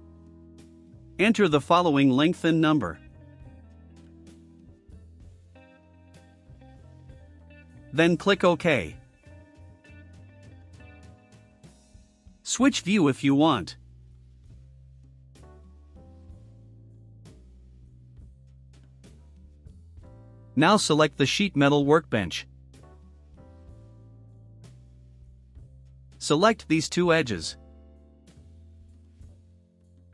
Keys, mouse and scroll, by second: 1.4 click, 2.1-3.4 typing, 4.0 click, 5.5 5, 6.0 click, 10.6 click, 13.4 click, 14.6 click, 15.4 click, 16.7 click, 17.3 click, 18.1 click, 18.7 right click, 20.6 click, 23.8 click, 25.9 click, 27.5 click, 28.1 click, 30.0 ctrl+click.